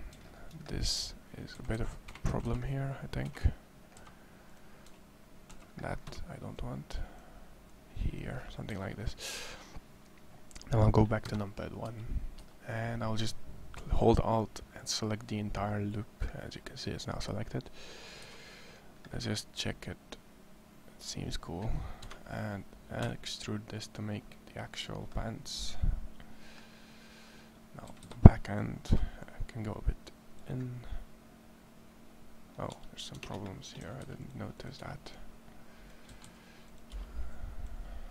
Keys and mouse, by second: 1.3 a, 1.6 a, 2.1 c, 2.3 c, 3.7 c, 5.4 c, 6.3-7.9 drag, 8.5 a, 11.1 KP_1, 11.6 z, 12.2 z, 17.9 KP_1, 21.8 KP_1, 22.8 e, 27.7 a, 27.9 c, 29.1-30.1 drag, 32.5 Tab, 32.9 Tab, 33.7 a, 34.1 c, 35.9 a, 36.1 c.